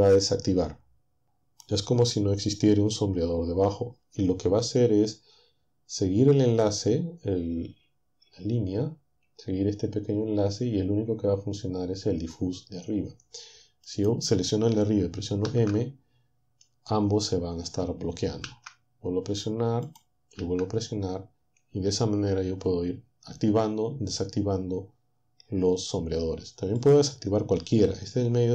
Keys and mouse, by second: 13.9 click, 15.5 m, 18.5 m, 19.9 click, 20.4 m, 26.8-28.5 drag.